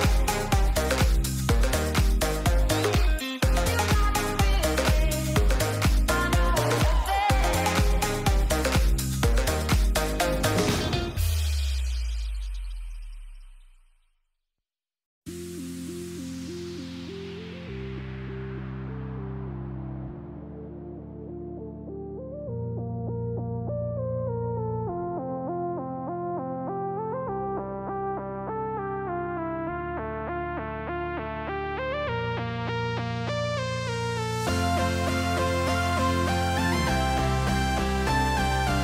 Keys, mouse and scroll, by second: 0.2 click, 0.8 ctrl+a, 1.8 ctrl+a, 2.0 ctrl+a, 4.1 ctrl+a, 4.8 ctrl+a, 5.0 ctrl+a, 6.3 click, 8.4 click, 12.3 click, 12.9 click, 13.6 ctrl+a, 14.5 ctrl+a, 14.8 ctrl+a, 15.0 ctrl+a, 15.3 ctrl+a, 15.5 ctrl+a, 16.2 ctrl+a, 17.2 middle click, 19.3 middle click, 19.9 click, 22.5 click, 23.1 click, 23.7 ctrl+a, 24.4 ctrl+a, 24.7 ctrl+a, 24.9 ctrl+a, 25.0 ctrl+a, 25.3 ctrl+a, 26.0 click, 27.1 click, 28.0 ctrl+a, 28.7 ctrl+a, 28.9 ctrl+a, 29.0 ctrl+a, 29.2 ctrl+a, 29.7 click, 30.4 click, 30.8 click, 31.2 click, 32.1 click, 32.5 click, 33.2 click, 34.0 ctrl+s, 34.6 shift+middle click, 35.2 middle click, 36.8 shift+middle click, 38.4 Tab.